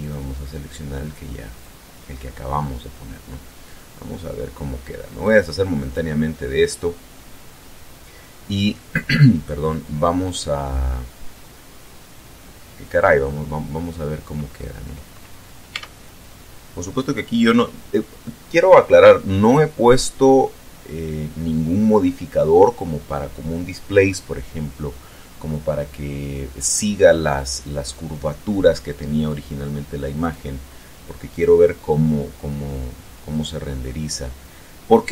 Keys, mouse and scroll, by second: 0.0 click, 1.5 click, 5.2 click, 10.1-10.7 scroll up 1, 11.2 scroll down 1, 15.7 Tab, 30.1 click, 31.3 click.